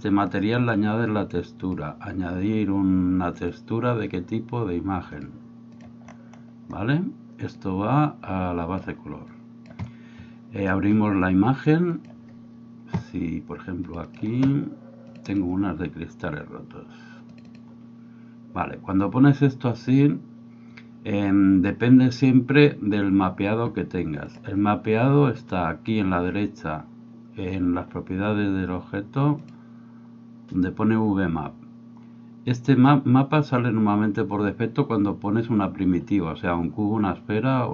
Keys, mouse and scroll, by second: 1.6-5.8 drag, 7.7-8.8 drag, 9.4 click, 11.9 click, 24.3 click, 29.5 click.